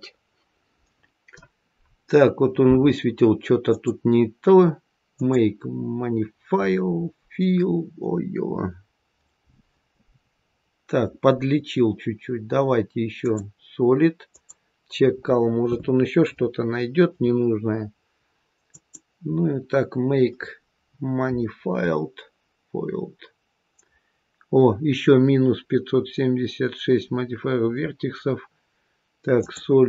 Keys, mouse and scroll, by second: 3.7 click, 5.0 click, 13.1 click, 14.2 click, 22.5 click, 29.4 click.